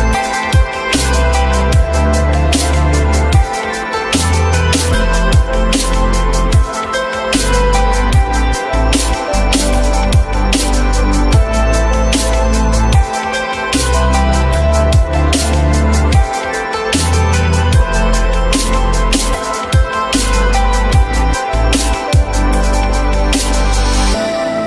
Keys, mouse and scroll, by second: 0.1 e, 1.9 shift+click, 9.0 ctrl+z, 13.5 F9, 14.6 shift+click, 18.8 shift+click, 22.3 shift+click.